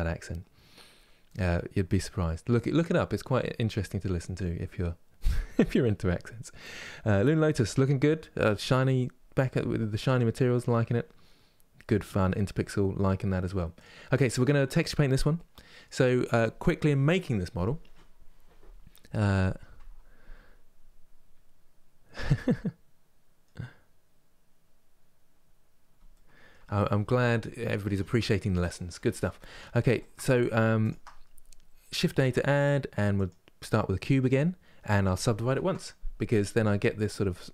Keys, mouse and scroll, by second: 13.5 click, 14.1 scroll down 2, 15.0-29.1 middle drag, 29.1 Tab, 29.6 shift+middle click, 30.5-33.7 shift+right drag, 33.7 shift+a, 35.2 ctrl+1, 35.8-37.5 middle drag.